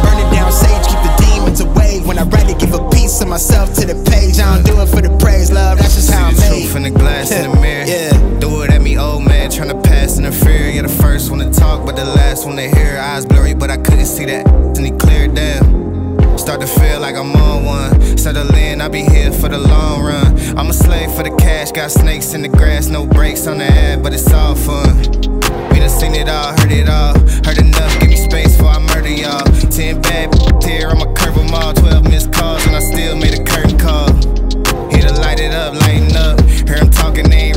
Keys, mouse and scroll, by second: 0.7-5.9 drag, 14.8-18.9 drag, 22.3 click, 25.4-26.3 drag.